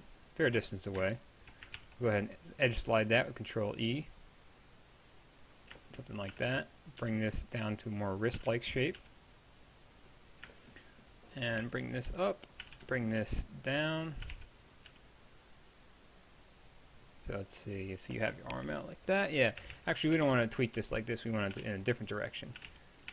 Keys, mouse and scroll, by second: 1.8 ctrl+e, 6.3 a, 6.5 b, 7.0 g, 8.4 a, 8.5 b, 9.0 g, 11.5-13.2 typing, 14.3 a, 14.3 b, 14.9 g, 19.8 ctrl+z, 20.2-23.1 typing.